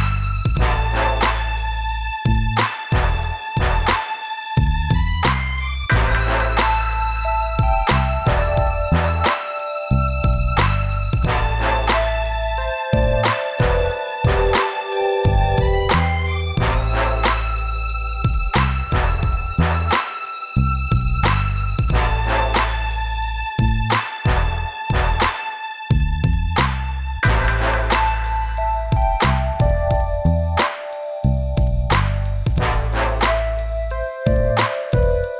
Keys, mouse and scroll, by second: 2.4 click, 2.5 click, 2.6 click, 5.0 click, 8.8 scroll down 2, 8.8 b, 11.2 scroll up 2, 13.6 b, 14.5 scroll down 2, 17.6 click, 17.7 click, 18.4 click, 20.0 click, 20.1 click, 21.2 scroll up 2, 23.5 middle click, 24.5 scroll up 1, 31.8 click, 31.8 click.